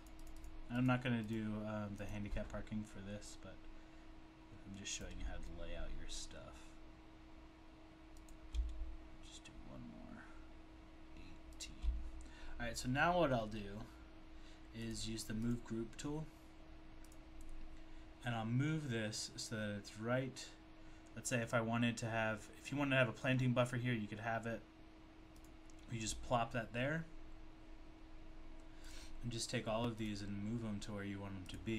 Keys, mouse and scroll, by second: 0.3 double click, 0.5 click, 0.9 click, 1.3 click, 4.5 click, 5.0 click, 8.2 shift+click, 11.5 shift+double click, 14.8 click, 15.5 click, 17.1 click, 25.4 click, 28.9 click, 31.5 click.